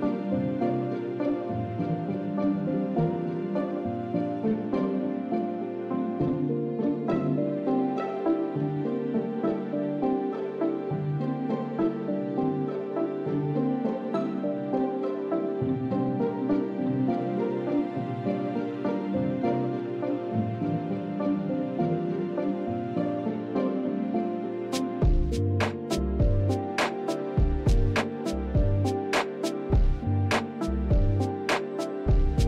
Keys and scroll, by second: 6.4 shift+z, 7.0 shift+z, 9.3 s, 11.9 shift+z, 12.9 Tab, 17.0 Tab, 17.8 Tab, 31.5 ctrl+z.